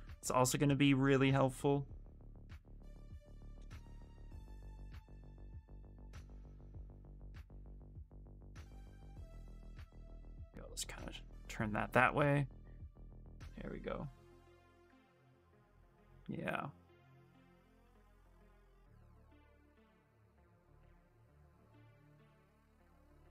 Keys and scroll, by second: 2.9 shift+f, 6.8 s, 14.6 s.